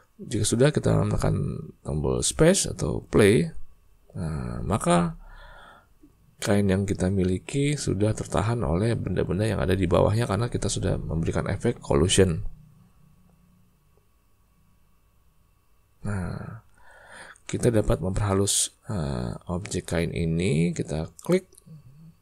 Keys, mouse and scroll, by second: 2.3 space, 16.2 space, 21.2 click.